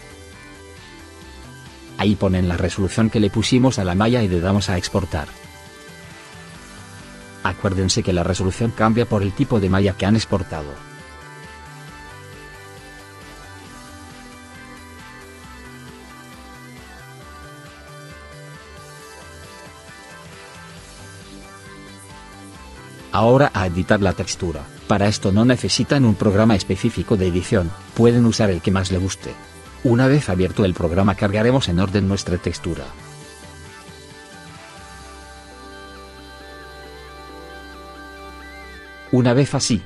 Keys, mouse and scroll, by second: 37.6 right click.